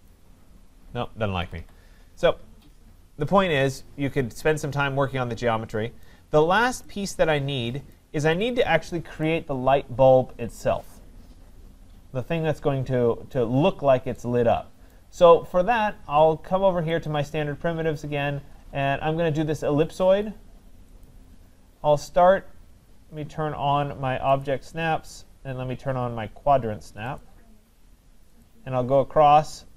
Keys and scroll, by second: 1.4 Escape.